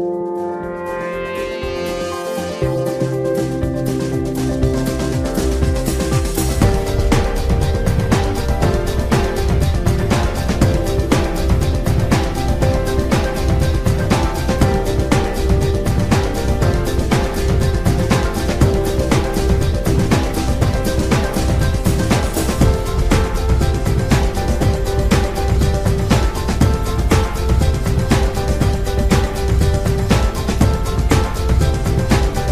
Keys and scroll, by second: 15.9 Return, 23.0 Return.